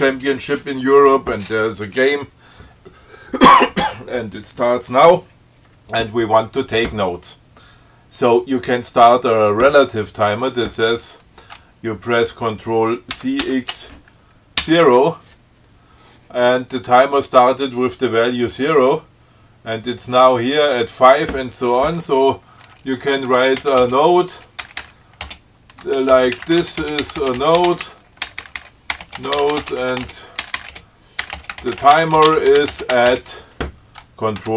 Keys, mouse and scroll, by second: 13.5 ctrl+c, 13.7 ctrl+x, 14.9 0, 23.9-33.7 typing.